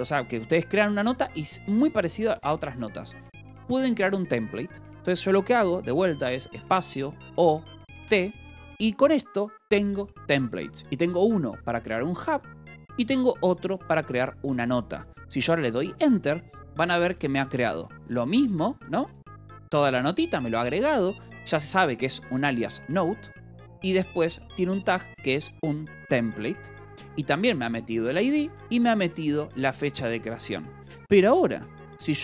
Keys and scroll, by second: 7.1 space, 7.2 o, 8.0 t, 11.9 ctrl+p, 15.9 Return, 16.6 Escape, 16.8 k, 18.1 BackSpace, 18.7 Escape, 19.0 j, 19.3 j, 20.5 k, 21.9 shift+v, 23.2 Escape, 23.9 j, 25.0 j, 25.4 Escape, 26.8 j, 28.0 shift+v, 28.4 Escape, 28.6 j, 29.4 shift+v, 30.3 Escape, 31.3 space.